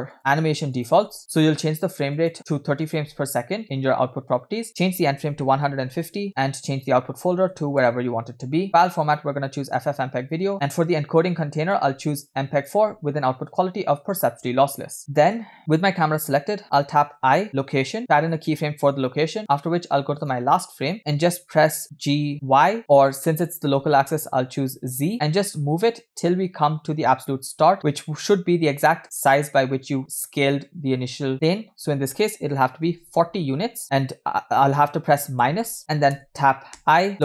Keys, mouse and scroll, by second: 0.1 click, 0.7 click, 2.1-3.1 drag, 4.7-6.1 drag, 6.7-8.0 drag, 7.7 /, 8.9-10.0 drag, 10.3 scroll down 2, 11.6-12.9 drag, 13.5-14.3 drag, 15.1 scroll down 5, 15.6 scroll up 2, 17.2 i, 21.0 click, 21.9 g, 36.8 i.